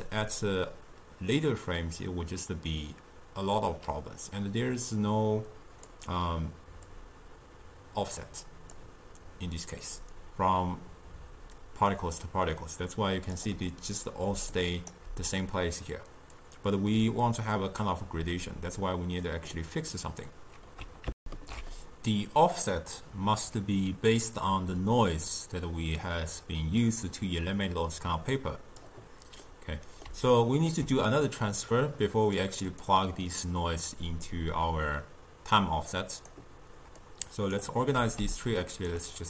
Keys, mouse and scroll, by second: 0.4-4.2 drag, 7.0-10.0 drag, 11.7-14.4 drag, 14.4 d, 14.7 right click, 15.0 d, 15.6 d, 16.5-21.2 drag, 21.3 ctrl+alt+shift+q, 26.9-29.5 drag, 29.5-32.5 middle drag, 32.5 click, 33.5-36.8 drag, 37.1 click, 38.0 g, 39.1-39.2 drag.